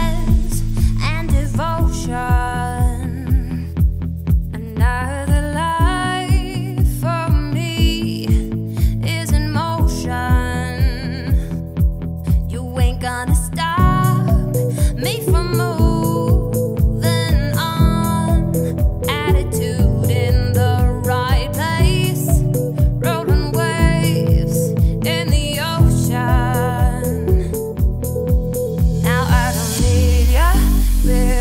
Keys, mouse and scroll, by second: 0.0 click, 0.3 click, 1.1 shift+click, 2.0 ctrl+KP_Subtract, 2.6 scroll up 2, 2.9-3.8 middle drag, 3.8 ctrl+s, 26.8-27.5 middle drag, 27.5 click.